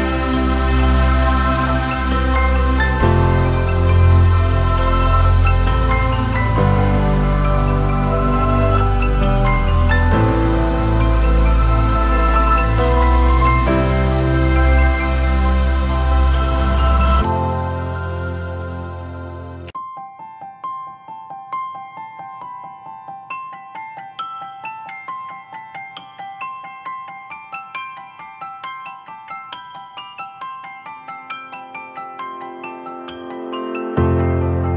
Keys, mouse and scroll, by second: 1.9 double click, 6.3 ctrl+Return, 12.4-13.0 scroll up 1, 13.2 ctrl+t, 13.9 ctrl+t, 14.6 alt+shift+click, 19.9 Return, 28.7 ctrl+t.